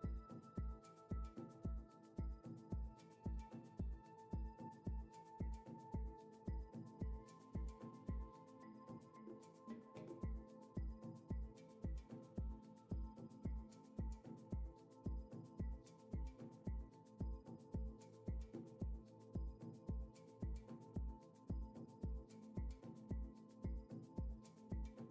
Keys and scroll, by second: 1.8-3.9 typing, 4.0 Return, 13.8 n.